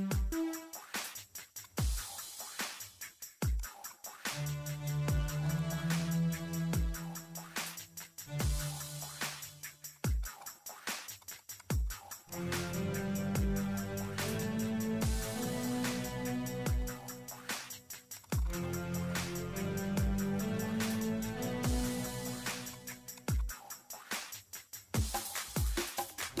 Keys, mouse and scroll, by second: 0.1 click, 0.5-1.3 typing, 1.7 click, 1.7 scroll up 2, 1.8 scroll down 2, 1.9 scroll up 2, 2.2-3.6 ctrl+middle drag, 3.6 click, 5.4 click, 6.6 click, 8.0 click, 8.2 middle click, 8.8 click, 9.0 middle click, 9.9 click, 10.2 right click, 10.4 click, 10.8 scroll down 2, 11.0 scroll up 2, 11.2 click, 12.9 click, 14.0 click, 14.6-16.0 middle drag, 16.0 click, 16.8 click, 17.0 right click, 17.5 click, 18.1 click, 19.3 ctrl+scroll up 2, 19.4-20.7 ctrl+middle drag, 20.7 click, 21.0 right click, 21.3 click, 22.3-23.1 typing, 22.7 click, 23.4-26.4 middle drag.